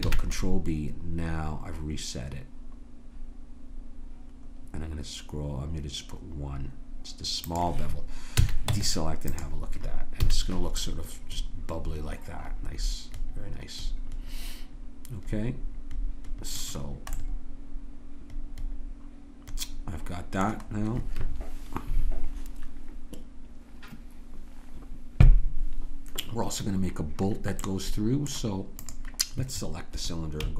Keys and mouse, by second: 0.0 ctrl+b, 8.4 a, 8.7 Tab, 10.2 a, 10.5 middle click, 15.5 middle click, 16.9-18.6 middle drag, 19.5 middle click, 25.5-27.7 middle drag, 28.8-30.5 drag.